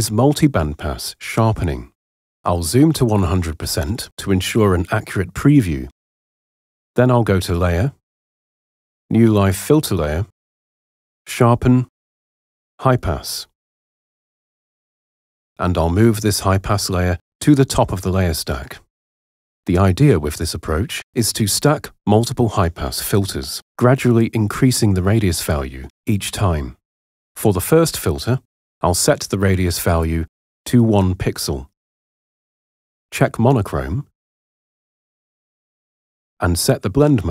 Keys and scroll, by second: 3.1 super+1, 31.0 1, 31.8 Return.